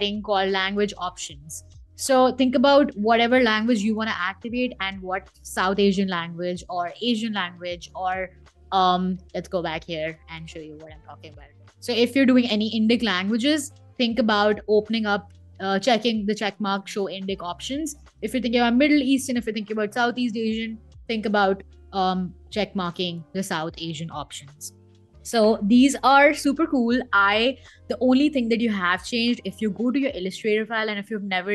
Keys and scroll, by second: 13.9 super+Tab, 17.1 super+Tab, 20.3 super+Tab.